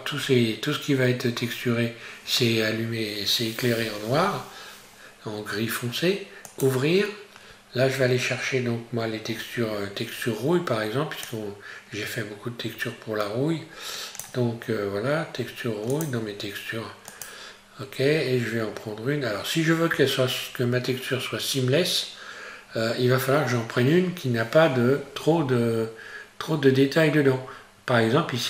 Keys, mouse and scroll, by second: 0.2-2.7 scroll up 1, 6.5 click.